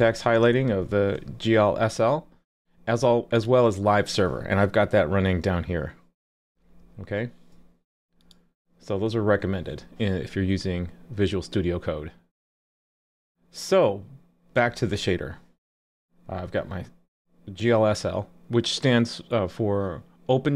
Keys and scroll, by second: 6.8 super+b.